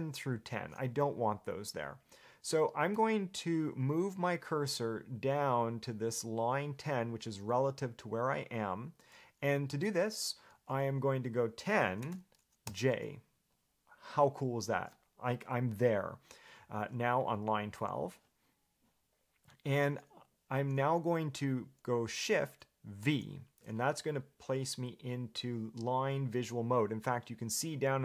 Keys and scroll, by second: 12.0-13.0 typing, 23.2 shift+v.